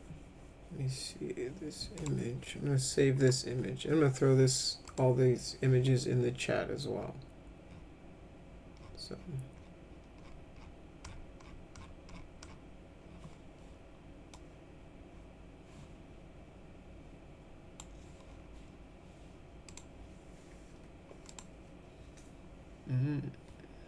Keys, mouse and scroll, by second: 2.0 right click, 3.2 click, 4.9 click, 14.3-17.8 drag, 19.7 click, 21.3 click.